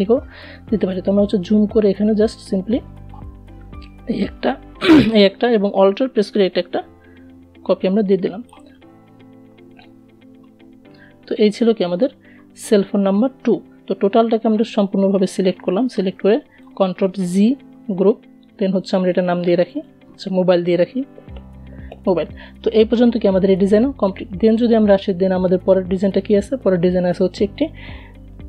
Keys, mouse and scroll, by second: 2.3 alt+v, 4.7-9.8 alt+drag, 13.1-15.7 drag, 15.7 ctrl+g, 18.0 click, 18.9-20.4 typing, 24.5 click.